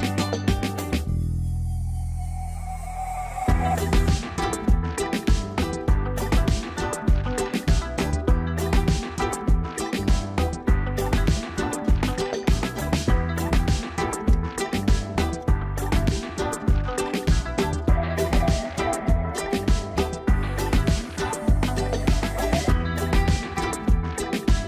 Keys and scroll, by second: 3.8 ctrl+t, 21.8 ctrl+g.